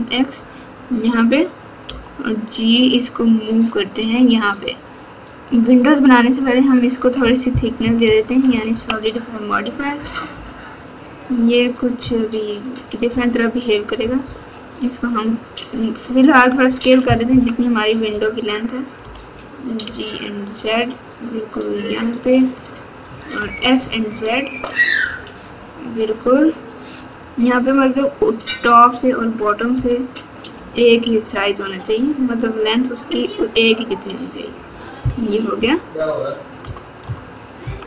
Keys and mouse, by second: 1.8 g, 6.4 click, 7.8 KP_2, 8.0 KP_2, 8.4 KP_2, 8.6 KP_2, 9.9 KP_4, 10.3 KP_4, 12.0 KP_2, 13.1 KP_8, 15.7 click, 17.2 KP_1, 19.0 g, 23.3 s, 29.7 g, 35.5 KP_9, 36.6 KP_9, 37.6 KP_9, 37.6 KP_1.